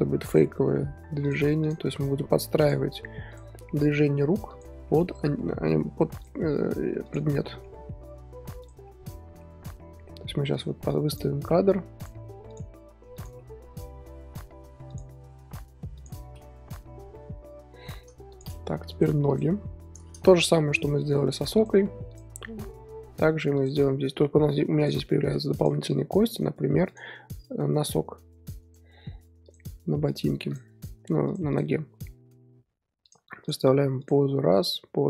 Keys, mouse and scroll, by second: 0.3 drag, 0.5 r, 1.6 click, 1.8 r, 3.3 click, 3.5 r, 4.8-6.2 middle drag, 6.2 click, 6.2-7.0 middle drag, 7.0 click, 7.4 middle drag, 7.7 r, 8.8-10.5 middle drag, 10.5 click, 11.1 click, 11.5 r, 12.5 drag, 12.7 r, 13.4-14.9 middle drag, 14.9 drag, 15.2 r, 16.2 scroll down 4, 16.3-16.8 middle drag, 16.8 z, 16.9 z, 16.9 scroll up 2, 17.1 scroll down 1, 17.1-18.3 middle drag, 18.3 click, 18.9 click, 19.3 click, 19.5 KP_3, 20.3 shift+middle click, 20.9 r, 22.1 click, 22.3 r, 24.0-24.8 scroll up 3, 24.8 click, 25.0-25.6 shift+middle drag, 25.6 drag, 25.9 r, 26.8 click, 27.2 r, 29.4 click, 29.7 r, 30.5 click, 30.7 r, 31.5 click, 32.0 r, 33.4 click, 33.6 r, 34.5 drag, 34.7 r.